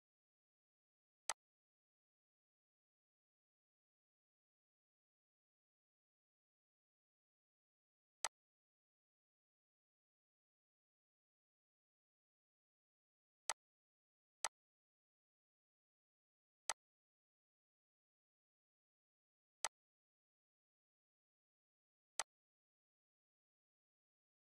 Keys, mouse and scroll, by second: 1.3-5.6 drag, 8.2-16.7 drag, 19.7 click, 22.1 click.